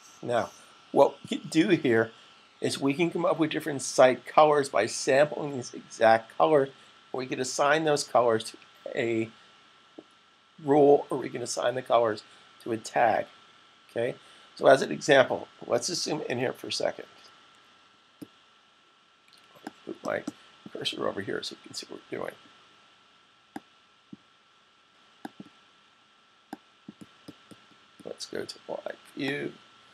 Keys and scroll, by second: 16.5 super+=, 17.0 super+=.